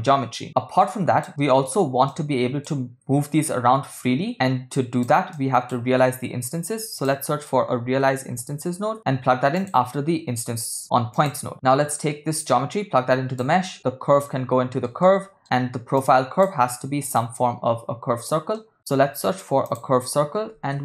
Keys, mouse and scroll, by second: 0.8 click, 1.4 middle click, 2.1 click, 4.8-5.1 drag, 5.3-5.8 drag, 6.1 shift+a, 11.5 click, 12.4-13.5 drag, 14.3 ctrl+middle click, 15.0 ctrl+middle click, 16.0 click, 17.2-18.3 drag, 18.5 middle click, 18.8 shift+a.